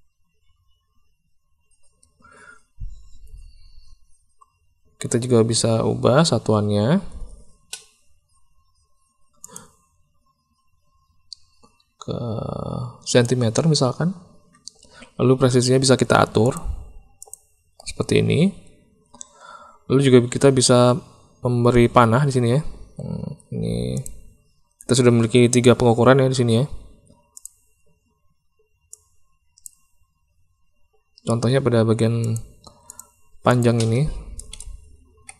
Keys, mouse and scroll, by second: 9.4-13.2 drag, 16.4 click, 17.1 click, 23.9 click, 27.3 click, 32.2 click, 32.8 click, 33.4-35.3 drag.